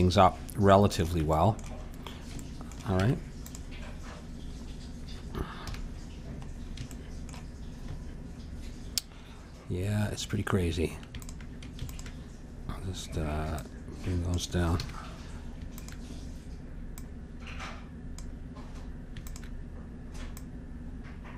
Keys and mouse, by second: 3.0 Tab, 5.6 KP_1, 11.2-15.3 drag, 14.8 a, 15.7-18.0 drag, 18.3 click, 19.2-21.3 drag.